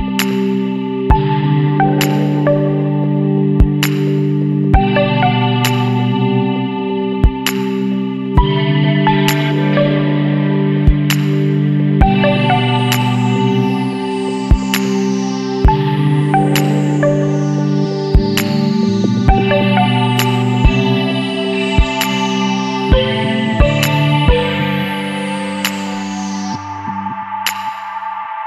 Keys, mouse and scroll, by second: 2.6 click, 4.4 click, 5.6 KP_6, 5.9 KP_Enter, 6.8-7.5 scroll down 2, 8.1-9.1 scroll up 3, 10.9 click, 12.7 click, 14.7 click, 16.6 click, 17.8 Escape, 18.9 click, 20.2 click, 21.4 KP_7, 21.7 KP_2, 22.1 KP_Enter, 24.4 click, 26.0 click, 27.0 KP_1, 27.3 KP_8, 27.6 KP_0, 28.0 KP_Enter.